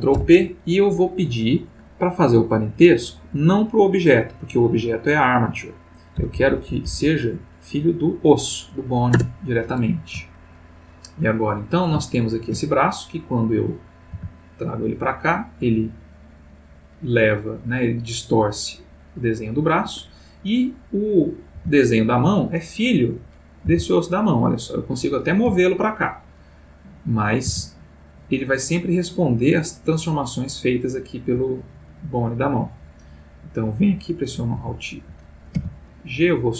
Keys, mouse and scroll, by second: 0.1 ctrl+p, 6.1 Down, 9.1 Return, 10.4-11.1 ctrl+middle drag, 11.2 ctrl+middle click, 12.0-12.7 shift+middle drag, 13.3 click, 14.1 r, 19.8 Escape, 21.0 click, 21.5 g, 22.3 click, 23.0 click, 23.7 r, 24.8 Escape, 25.3 click, 25.7 g, 26.2 click, 26.8 click, 27.5 r, 31.4 Escape, 32.3 click, 34.5 alt+g, 35.6 g.